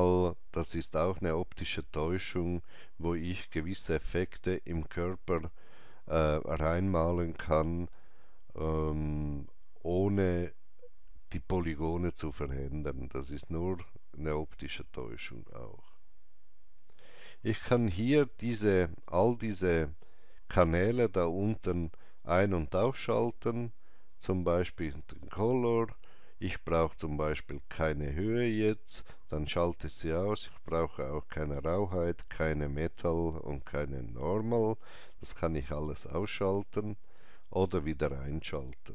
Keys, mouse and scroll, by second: 15.7 scroll down 1, 17.6-18.2 scroll up 1, 18.2 scroll down 1, 19.9 scroll down 1, 21.5 scroll up 1, 24.1 click, 24.1-25.0 scroll up 1, 25.1 click, 28.0 click, 30.5 click, 36.1 click.